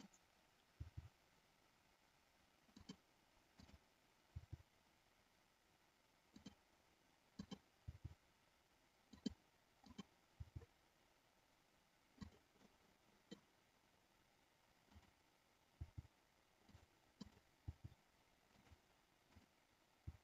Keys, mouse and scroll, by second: 0.8 g, 2.7 click, 4.3 g, 7.3 click, 7.9 g, 9.1 click, 10.3 g, 12.6 middle click, 12.6 scroll up 1, 14.8 click, 15.7 g, 16.7 click, 17.2 click, 17.7 g, 18.6 click, 19.2 click.